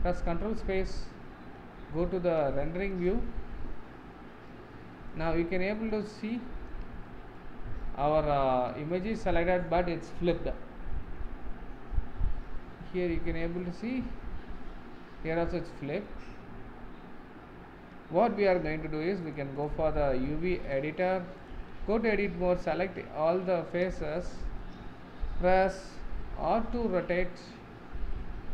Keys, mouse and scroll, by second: 3.7 z, 4.5-6.4 middle drag, 6.4-7.1 scroll up 3, 7.1-12.2 shift+middle drag, 12.2 scroll down 2, 12.4-15.4 middle drag, 16.9-17.2 scroll down 1, 17.2 scroll up 2, 20.7-21.5 drag, 21.7 Tab, 26.2 r.